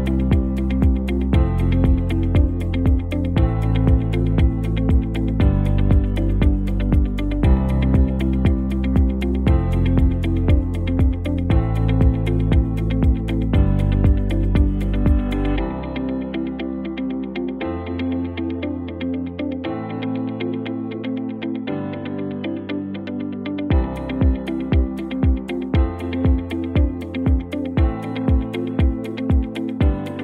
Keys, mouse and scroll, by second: 0.9 ctrl+t, 1.6-2.4 drag, 12.6 click, 13.2 c, 13.5 v, 14.3 click, 14.7 alt+scroll down 1, 16.6 alt+scroll up 1, 17.4 space, 17.5-17.9 click, 17.8 space, 19.3 click, 19.5 right click, 20.3 click, 22.5-23.3 shift+click, 24.2 v, 25.2 click, 26.0 alt+scroll down 1, 29.2 shift+click.